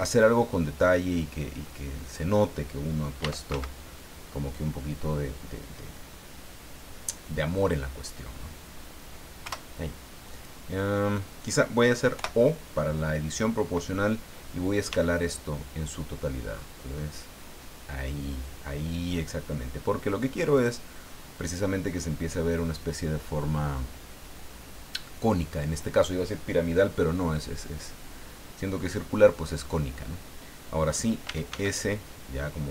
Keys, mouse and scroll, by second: 0.1-2.3 drag, 3.2 e, 3.5 z, 9.4 Return, 12.1 o, 14.9 s, 16.5-17.2 scroll up 4, 17.6 scroll up 2, 20.5 click, 31.0-32.0 typing.